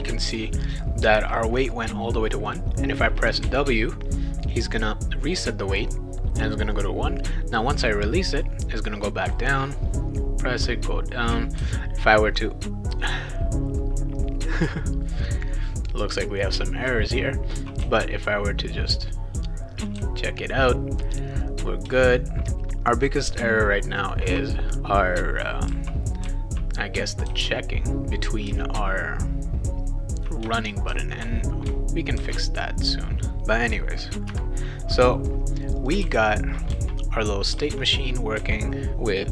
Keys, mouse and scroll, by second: 2.5 click, 3.5 w, 9.2 w, 11.6 shift+w, 16.5 shift+w, 17.8 s, 20.0 w, 21.9 shift+w, 22.5 shift+w, 24.3 w, 25.7 w, 26.2 w, 27.2 w, 28.5 s, 30.9 shift+w, 32.2 shift+w, 35.8 click, 36.0-38.9 typing.